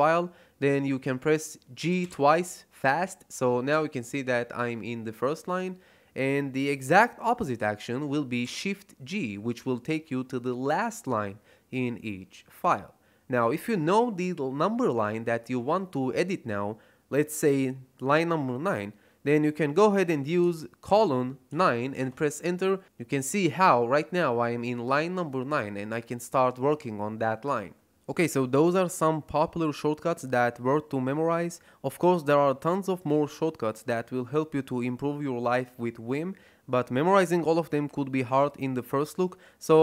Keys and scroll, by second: 1.7 g, 1.9 g, 8.3 shift+g, 20.8 shift+;, 21.4 9, 21.9 Return.